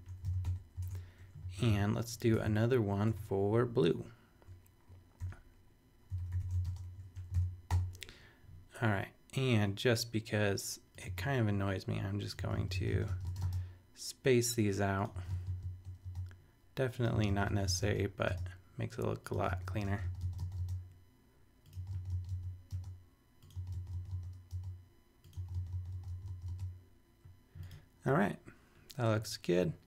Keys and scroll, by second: 0.2 shift+super+v, 0.4 super+;, 0.8 super+Tab, 1.4 shift+super+Tab, 1.5 shift+super+e, 2.3 shift+super+Tab, 3.1 super+Return, 5.2-8.5 typing, 7.7 super+;, 11.1 space, 12.4 space, 15.1 space, 17.1 space, 19.3 space, 21.7 space.